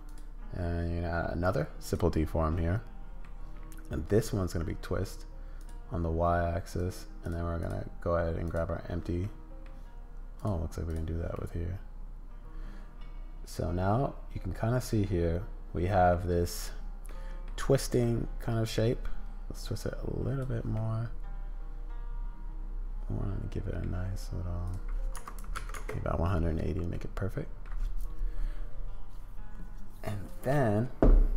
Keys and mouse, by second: 0.2-2.0 drag, 2.5 middle click, 5.6 click, 7.7 click, 9.2 middle click, 10.4 click, 11.3-17.5 middle drag, 18.0-19.5 middle drag, 19.5-20.5 drag, 20.5 middle click, 23.8 middle click, 24.6-26.4 drag, 26.4 middle click, 27.6-31.3 middle drag.